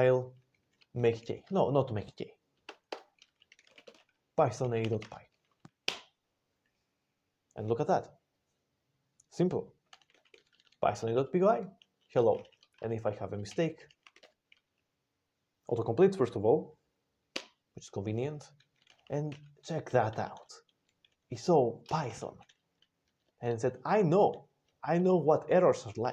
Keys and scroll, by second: 2.6 alt+BackSpace, 2.8 alt+BackSpace, 3.1-5.7 typing, 5.7 Return, 9.9 ctrl+x, 10.1 o, 10.4 ctrl+n, 10.5 ctrl+n, 10.8 ctrl+n, 12.0 ctrl+x, 12.6 ctrl+x, 13.4 ctrl+x, 13.5 ctrl+s, 13.6 ctrl+x, 17.2 Return, 18.8 ctrl+x, 19.2 o, 19.8 ctrl+n, 20.0 ctrl+n, 20.2 ctrl+n, 21.7 ctrl+space, 22.2 alt+f, 23.1 ctrl+g, 24.6 ctrl+n.